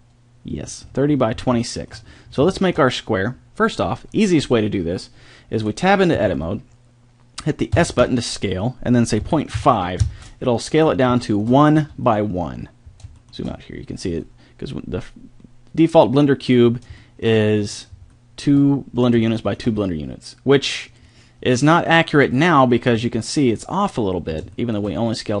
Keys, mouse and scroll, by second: 2.5 middle drag, 6.2 Tab, 7.8 s, 11.8 Tab, 12.6 middle click, 12.8 middle click, 14.1 g, 22.5-25.4 middle drag.